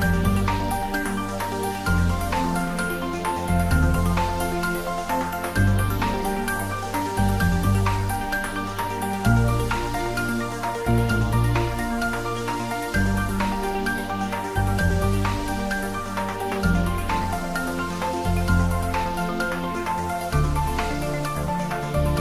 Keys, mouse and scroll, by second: 1.3 click, 1.6-3.0 scroll down 1, 3.0 a, 6.1 s, 7.3 click, 9.4 g, 16.2 click, 17.0-18.1 scroll down 1, 19.2-21.2 scroll down 1.